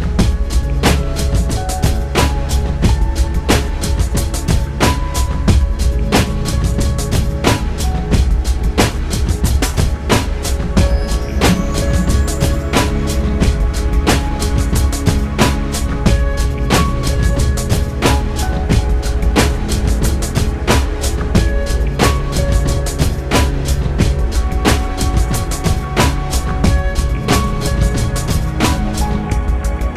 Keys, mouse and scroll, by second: 3.3-5.6 shift+middle drag, 7.4 right click, 17.9 click, 19.4-20.5 drag, 20.7 click, 21.9 click, 23.5 click, 26.9 click, 28.6 click.